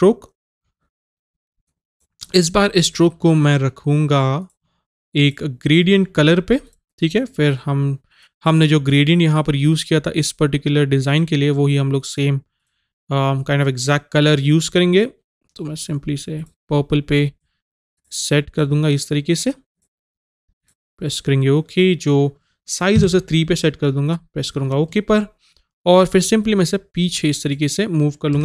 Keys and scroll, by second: 23.1 KP_3.